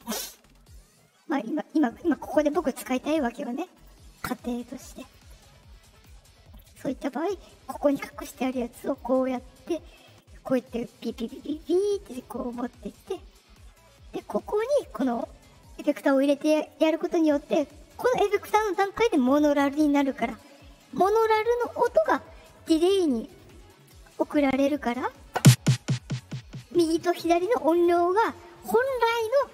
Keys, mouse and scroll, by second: 3.7 click, 4.9 click, 5.9 click, 6.4 click, 8.7 click, 10.2-12.1 drag, 14.3 click.